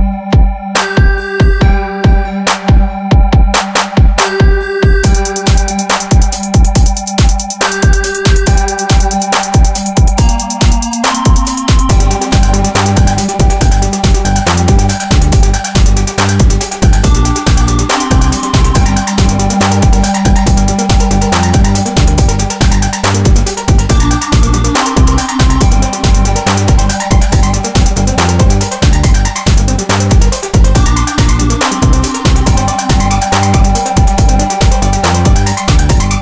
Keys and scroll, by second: 1.2 ctrl+1, 4.7 ctrl+r, 5.4 Escape, 8.1 ctrl+r, 8.4 Escape, 8.9 ctrl++, 11.1 ctrl+s, 12.2 Tab, 12.4 ctrl+1, 18.1 ctrl+1, 25.7 ctrl+e, 28.2 ctrl+r, 28.4 Escape, 28.9 ctrl+e, 31.6 ctrl+e, 32.7 ctrl+e.